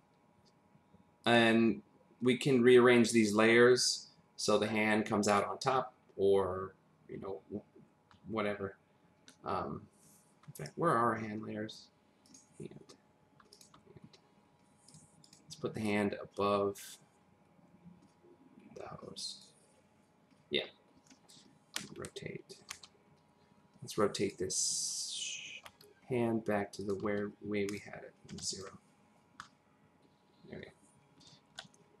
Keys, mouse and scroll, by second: 1.2 click, 3.9 click, 9.1-10.4 scroll down 1, 10.4 scroll down 2, 12.2 click, 13.5 ctrl+click, 14.0 scroll up 1, 14.9 click, 15.2 click, 15.8 click, 21.8-22.7 typing, 24.2 click, 25.6 typing, 26.8 click, 27.0 r, 27.7 click, 28.3 0, 28.4 click, 29.6-30.4 scroll up 1, 30.4-31.4 scroll, 31.4-32.0 scroll up 2.